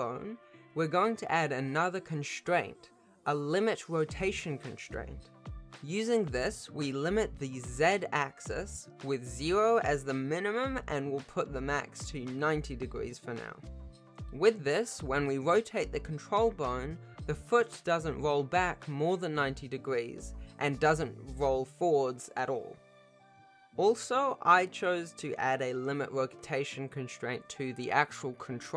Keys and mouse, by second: 3.2-5.0 drag, 8.4 click, 10.5 click, 11.0 click, 12.7 click, 12.8 BackSpace, 14.3 click, 14.6 r, 20.6 r, 22.0 r, 23.0 r, 23.8 alt+r, 26.3 ctrl+s, 26.7-28.7 drag.